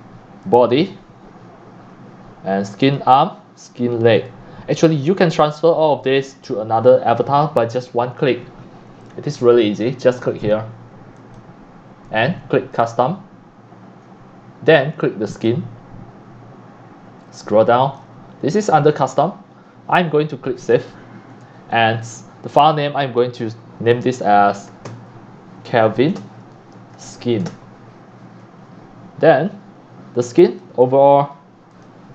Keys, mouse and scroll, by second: 0.4 click, 1.0 scroll down 1, 2.2 scroll up 1, 2.8 click, 4.2 click, 5.0 drag, 11.2 click, 12.7 click, 14.7-15.4 drag, 15.4 click, 17.3-18.0 drag, 20.6 click, 24.9-28.0 typing, 29.0 drag, 30.4 click, 31.7 click.